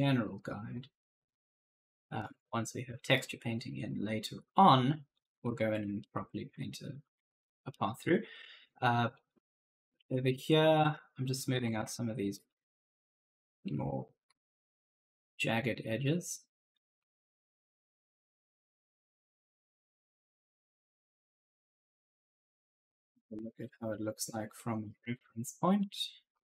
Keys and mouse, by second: 1.1 click, 3.0 right click, 3.0 d, 3.7 click, 4.9-6.9 typing, 5.0 right click, 5.8 right click, 8.5 click, 9.0-15.7 typing, 9.1 right click, 10.4 right click, 10.9 click, 11.4 right click, 11.8 click, 12.3 right click, 13.0 click, 13.4 right click, 16.2 click, 16.7 right click, 16.8 d, 17.5 click, 19.2-20.0 typing, 19.3 right click, 21.1-24.1 typing, 21.4 right click, 22.9 right click, 25.7-26.4 typing.